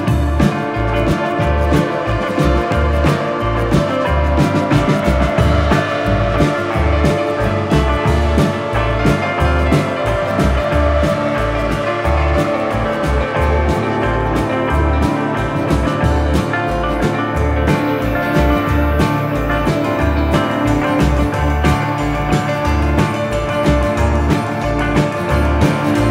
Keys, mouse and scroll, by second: 0.9 middle click, 1.4 shift+middle click, 2.7 click, 2.9 z, 3.9 z, 5.0 click.